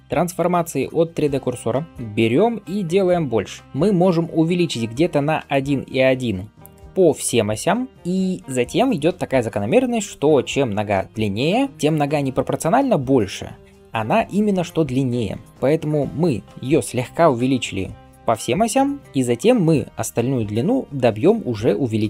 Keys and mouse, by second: 0.0-22.0 middle drag, 0.0 KP_3, 1.9 s, 21.8 s.